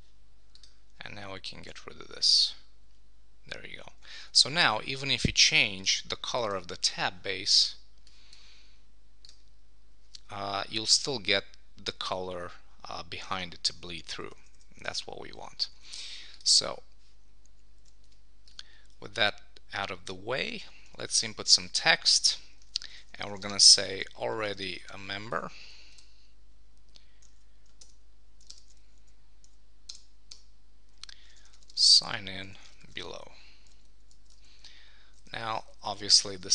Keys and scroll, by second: 3.9 super+s, 14.2 Escape, 15.7 super+s, 17.7 super+1, 22.6 shift+a, 25.5 shift+?, 25.9 Return, 27.3 super+a, 28.5 super+BackSpace, 29.0 Down, 30.3 Return, 32.8 shift+s, 34.0 Up, 34.1 Left.